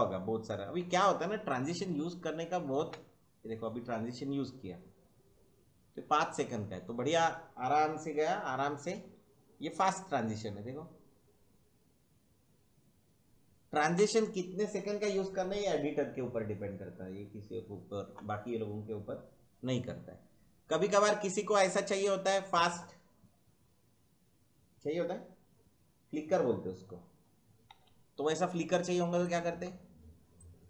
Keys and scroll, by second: 2.8 space, 13.8 space, 27.7 Delete, 29.5 Delete.